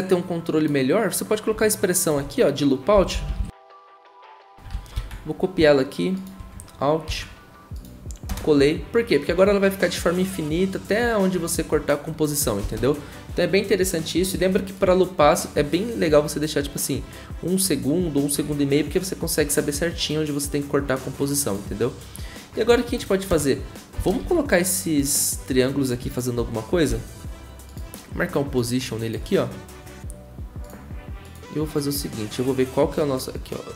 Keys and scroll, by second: 4.9 ctrl+a, 4.9 ctrl+c, 4.9 typing, 7.0 ctrl+v, 8.3 0, 23.3 0, 24.2 v, 26.9 p, 30.6 p.